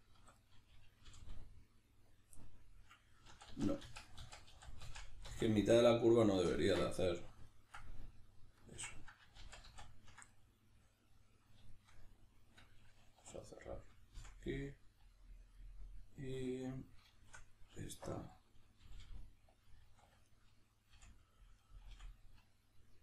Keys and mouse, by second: 0.4 right click, 1.1 g, 2.2 click, 2.4 middle click, 3.3 ctrl+z, 6.9-13.4 middle drag, 9.4 ctrl+z, 13.2 2, 13.4 right click, 14.1 f, 14.4-16.6 middle drag, 16.6 right click, 17.2 shift+middle click, 17.9 1, 18.1 right click, 18.8 g, 19.6 click, 20.1 2, 20.3 right click, 20.9 f, 21.6 right click, 21.9 f, 22.9-23.0 middle drag.